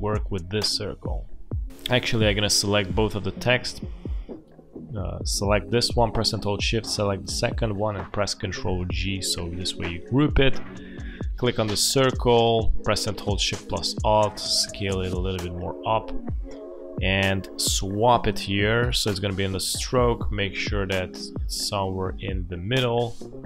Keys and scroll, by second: 0.1 space, 8.7 ctrl+g, 23.1 space.